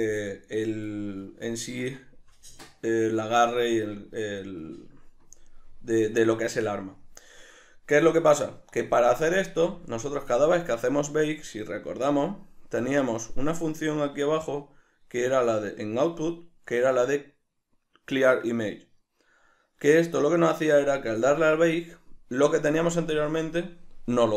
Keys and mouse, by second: 1.2-24.3 ctrl+middle drag, 9.6 a.